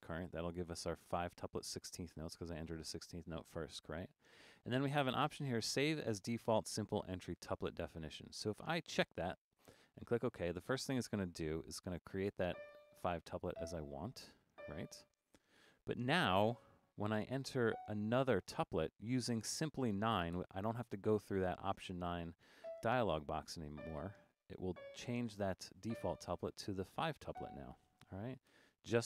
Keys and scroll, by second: 20.4 9, 28.5 9.